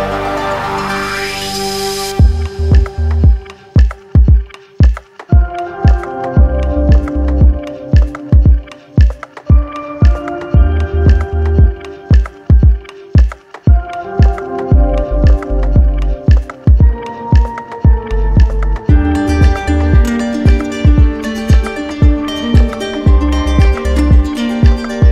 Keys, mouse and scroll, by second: 0.9 -, 2.6 1, 3.1 Return, 6.9-8.0 drag, 8.8-9.9 drag, 13.0 click, 14.0 click, 14.9-16.3 typing, 16.5 Return, 19.1 click, 20.5 click, 20.9 click, 21.5 alt+click, 24.7-25.1 drag.